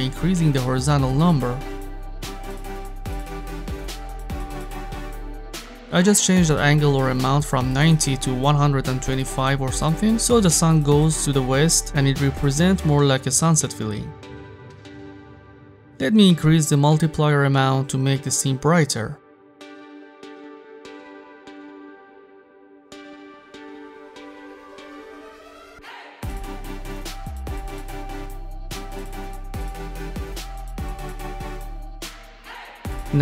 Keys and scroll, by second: 6.5 1, 6.9 5, 8.3 Return, 12.9 0, 13.1 Return, 19.0-20.0 typing, 26.7-28.1 typing, 28.2 Return.